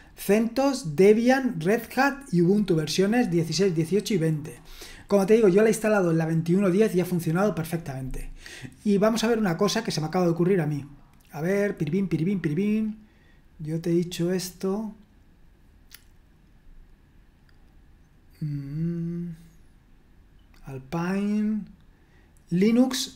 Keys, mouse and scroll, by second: 4.7-5.6 scroll down 1, 5.6-6.4 scroll down 1, 6.4-7.9 scroll down 1, 7.9-8.8 scroll down 1, 8.8-9.6 scroll down 1, 9.6-11.0 scroll down 1, 11.0-11.8 scroll down 1, 11.8-13.2 scroll down 1, 13.2-17.2 scroll down 1, 18.8-19.4 scroll up 1, 19.4-20.8 scroll up 1, 20.8-22.4 scroll up 1.